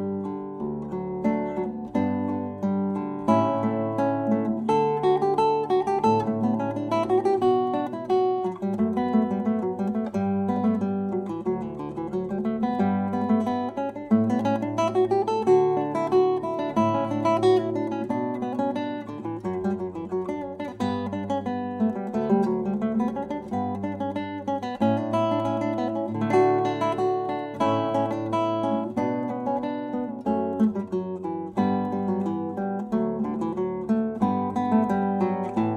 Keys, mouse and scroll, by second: 3.5-5.8 right drag, 6.3 s, 10.8 r, 15.5 s, 21.7 s, 24.1-29.0 drag, 29.6-32.1 drag.